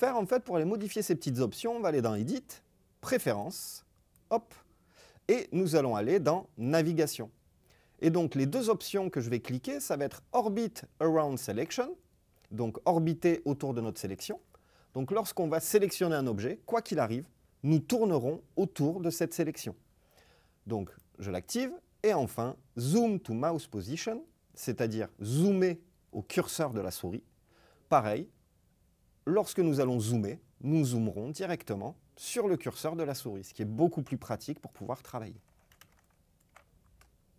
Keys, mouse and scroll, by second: 2.2-4.4 drag.